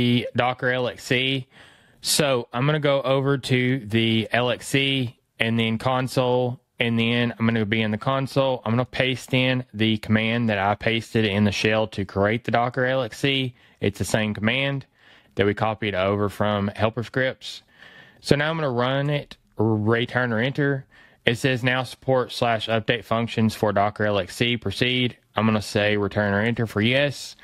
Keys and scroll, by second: 9.0 super+v, 14.0 fn+Right.